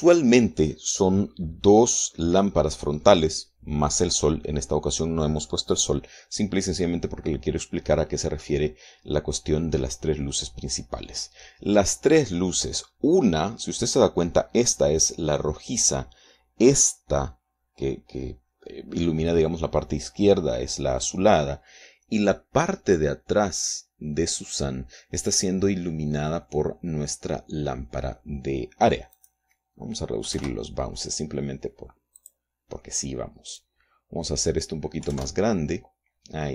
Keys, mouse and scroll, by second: 29.8 click, 30.8 KP_2, 31.0 KP_Enter, 32.8 click, 35.6 KP_3, 35.7 KP_Enter.